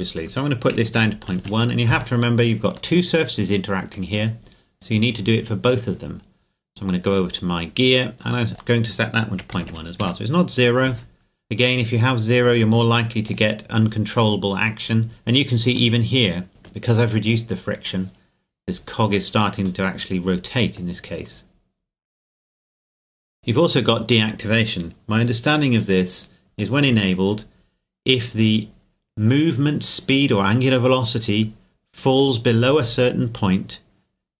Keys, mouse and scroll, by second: 0.9 KP_Decimal, 1.0 KP_1, 1.4 KP_Enter, 3.0 middle click, 4.3 scroll up 1, 4.9-6.8 scroll down 1, 7.1 right click, 8.5 click, 9.5 KP_Decimal, 9.6 KP_1, 10.0 KP_Enter, 11.2-12.7 scroll down 1, 12.7 click, 16.0 middle click, 19.8 middle click, 23.4 click, 26.6 click.